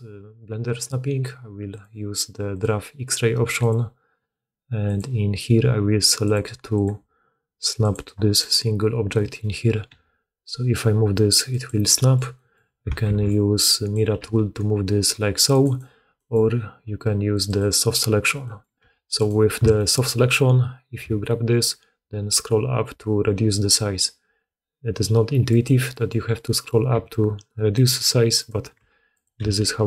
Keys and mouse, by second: 2.8 middle click, 5.8-8.4 drag, 9.4-11.7 middle drag, 9.8 g, 12.8 ctrl+middle click, 12.9 ctrl+d, 17.3-18.7 drag, 18.7 2, 19.0 click, 20.1 click, 20.9 g, 22.8-23.9 drag, 26.4 click, 26.6-27.6 middle drag, 26.8 g, 28.2 click, 28.4 middle click, 28.6 r, 29.3 g.